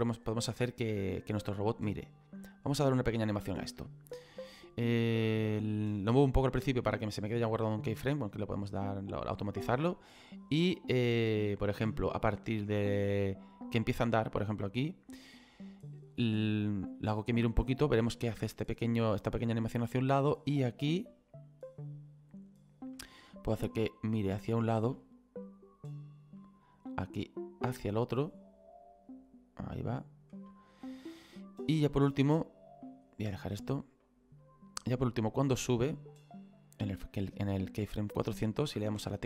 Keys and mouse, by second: 2.2 click, 5.2 middle click, 10.0 click, 16.1 click, 18.0 click, 24.1 click, 25.5 click, 27.3 click, 32.0 click, 33.6 middle click, 34.4 click, 37.3 middle click, 39.0 KP_1.